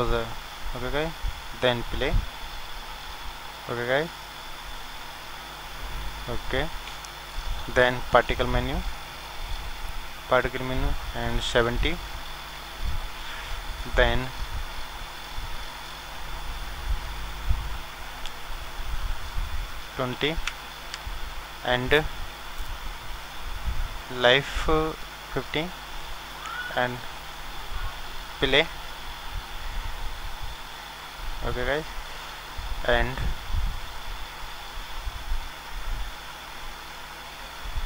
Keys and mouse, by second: 2.3 click, 3.4-6.4 drag, 6.3-12.7 middle drag, 9.7-12.9 drag, 14.4-30.1 drag, 31.9-34.3 drag.